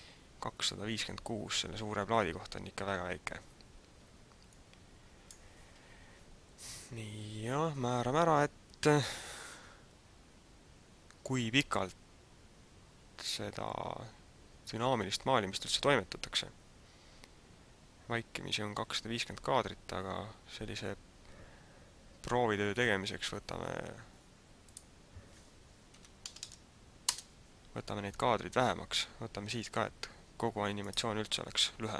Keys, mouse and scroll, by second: 4.7 click, 25.2 click, 30.9 click.